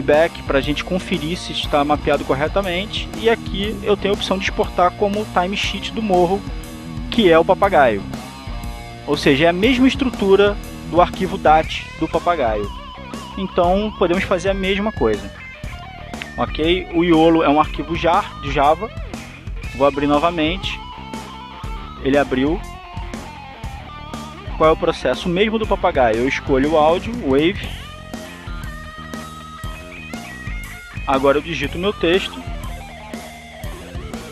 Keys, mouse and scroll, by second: 0.5 click, 4.1 click, 15.1 click, 16.2 click, 20.1 right click, 21.9 click, 24.0-25.7 drag, 26.2 click, 30.8 click, 31.5 click, 33.6-34.3 drag.